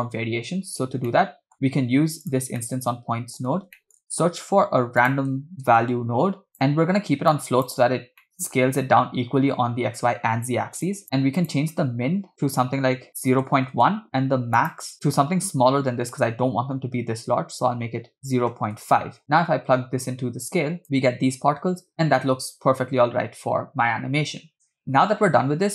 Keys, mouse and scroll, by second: 0.8 scroll down 3, 1.1 middle click, 1.7 scroll up 3, 2.2 drag, 2.6 middle click, 3.8 shift+middle click, 4.3 shift+a, 7.3 click, 8.2 middle click, 8.8-9.6 scroll up 2, 10.8 click, 11.4-13.8 drag, 14.6-18.9 drag, 19.2-20.8 drag, 20.8 space, 25.0 space.